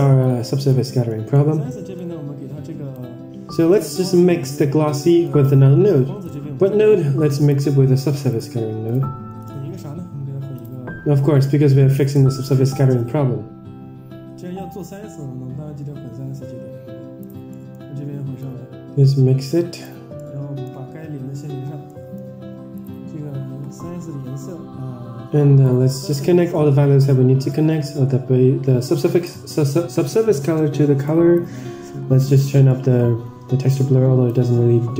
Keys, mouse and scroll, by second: 0.1-0.6 drag, 0.8 middle drag, 1.3-1.8 scroll up 3, 1.6 middle click, 2.9-3.8 drag, 5.0 middle click, 6.1 shift+a, 9.6 shift+a, 17.4 middle click, 18.3-20.1 drag, 20.3-20.7 middle drag, 21.5 scroll down 3, 21.8 middle click, 25.7 ctrl+s, 25.7 click, 26.0 scroll up 2, 26.2 middle drag, 27.5-29.2 drag, 31.0 click, 32.6 middle click, 34.2-34.9 drag.